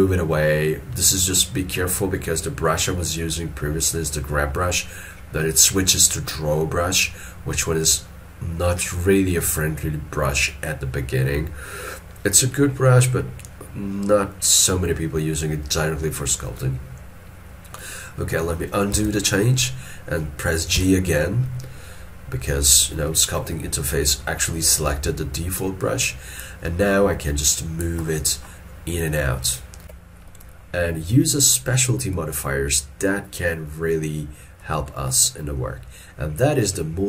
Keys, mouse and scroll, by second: 19.0 ctrl+z, 23.1 shift+middle click, 34.1 ctrl+middle click, 34.9 shift+middle click.